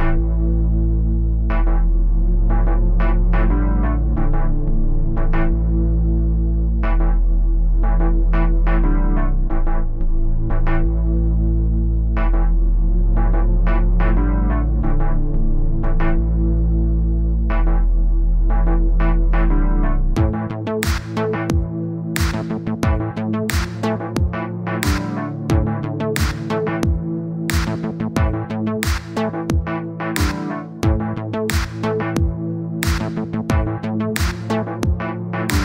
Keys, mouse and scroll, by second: 0.6 middle click, 1.1-2.2 drag, 2.2 middle click, 2.6 click, 3.4 middle click, 3.6-6.7 drag, 6.7 middle click, 7.1 click, 7.5 middle click, 8.0-9.9 drag, 9.9 middle click, 10.4 click, 11.4 middle click, 11.6 click, 12.6 middle click, 13.1 click, 13.4-14.6 middle drag, 14.7-15.1 scroll down 1, 15.1-21.4 drag, 22.6-24.9 middle drag, 25.9 KP_1, 26.4-27.4 scroll up 1, 27.4-28.6 drag, 29.9-30.5 scroll up 1, 30.5 scroll down 1, 32.3 click, 33.4-34.6 drag.